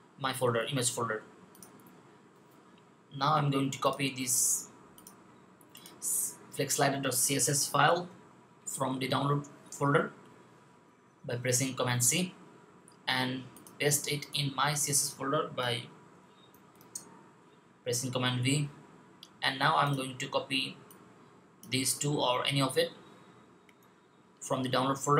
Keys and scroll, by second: 7.8 super+c, 16.6 super+v.